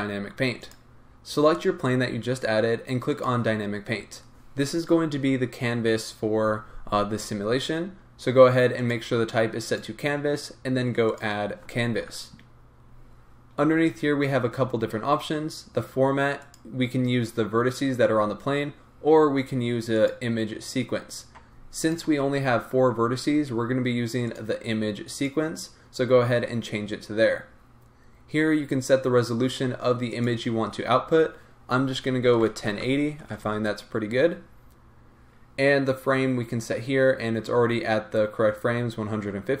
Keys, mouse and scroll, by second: 0.7 click, 3.2-21.9 drag, 25.2-39.6 drag.